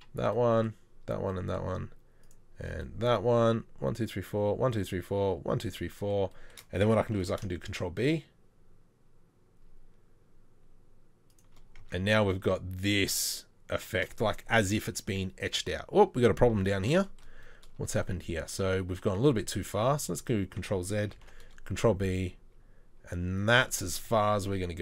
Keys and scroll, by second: 7.2 ctrl+b, 11.8 Tab, 16.6 ctrl+z, 20.1 ctrl+z, 21.3 ctrl+b, 24.0 Tab.